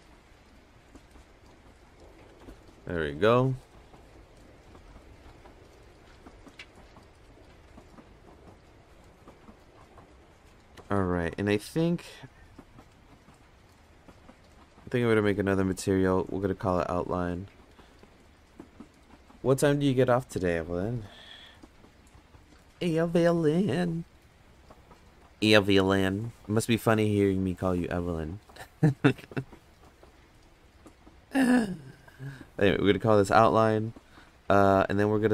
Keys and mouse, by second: 0.5 click, 0.8 click, 1.1 click, 1.5 click, 3.2-4.7 drag, 9.9 click, 12.9 click, 14.6 click, 15.3 click, 17.4 click, 17.5-23.3 drag, 32.6 click.